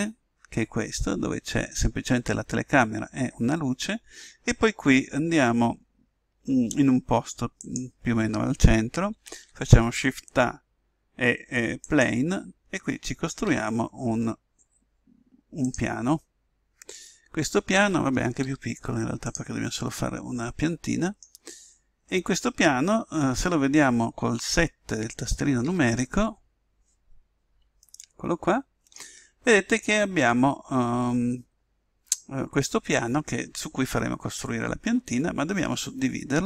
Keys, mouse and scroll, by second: 0.8-7.6 middle drag, 7.6-9.3 drag, 9.3 shift+a, 13.4 s, 16.1-17.2 middle drag, 18.4 s, 20.9-25.6 middle drag, 25.6 KP_7, 29.4-32.1 middle drag.